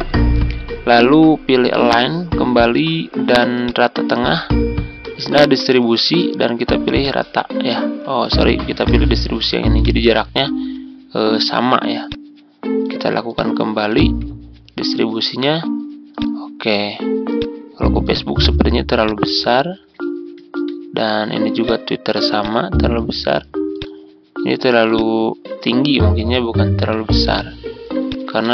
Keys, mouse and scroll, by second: 0.3-1.8 ctrl+scroll up 1, 1.8-11.9 drag, 13.9 shift+click, 16.1 click, 21.6 click, 22.9 ctrl+click, 23.7 click, 24.9-26.8 ctrl+drag, 27.3 shift+click, 28.0-28.5 shift+drag.